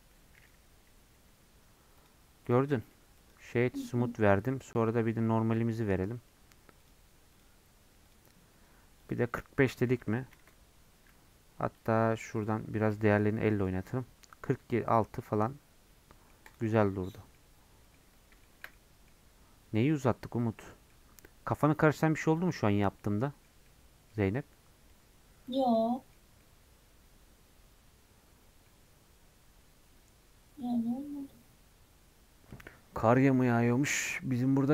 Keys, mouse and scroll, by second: 1.6 Tab, 2.0 click, 3.3-8.0 right drag, 8.0-14.9 drag, 14.9-16.5 middle drag, 16.5 click, 16.7 scroll down 2, 16.9 middle click, 17.3-26.1 middle drag, 26.1 scroll up 2, 26.4-34.7 middle drag.